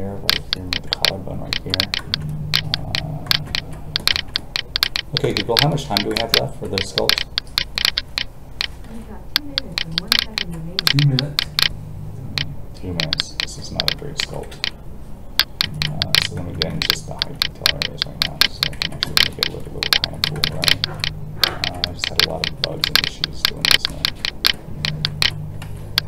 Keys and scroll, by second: 8.8 alt+a, 14.5 alt+a, 25.6 alt+a.